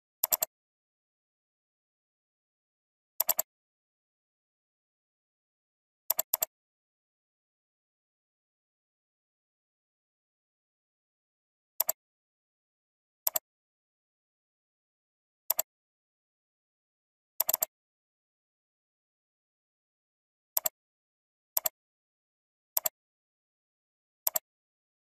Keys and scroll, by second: 7.3 alt+Up, 10.5 alt+Down, 18.8 alt+Up.